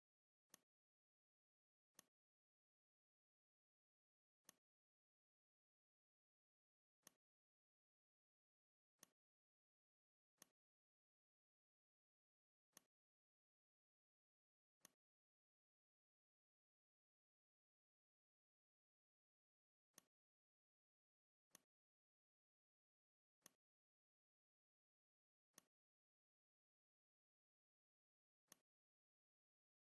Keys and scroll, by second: 19.7 space.